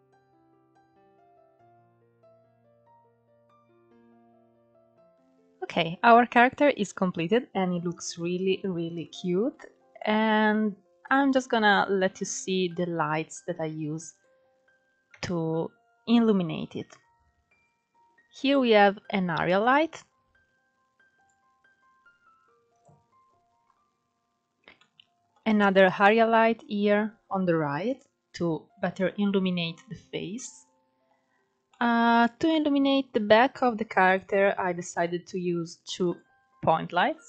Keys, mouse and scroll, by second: 0.2-1.9 drag, 1.9 KP_0, 2.8 scroll up 2, 3.7 scroll up 2, 4.9 scroll down 1, 5.1-7.2 middle drag, 7.2-7.6 scroll down 2, 7.6-8.2 middle drag, 8.2-8.6 scroll up 3, 8.3-10.9 middle drag, 9.4 scroll down 1, 12.2-13.7 scroll down 1, 13.7 click, 15.3 KP_0, 17.1-18.2 scroll up 5, 18.2 click, 19.0 click, 20.5-21.6 drag, 24.2-25.4 middle drag, 25.4 click, 27.1 click, 29.7-30.4 middle drag, 30.4-31.0 scroll up 4, 31.0-32.5 shift+middle drag, 32.5-33.4 scroll up 2, 33.4 drag, 35.3 click, 36.3 scroll down 1, 36.4-37.2 middle drag.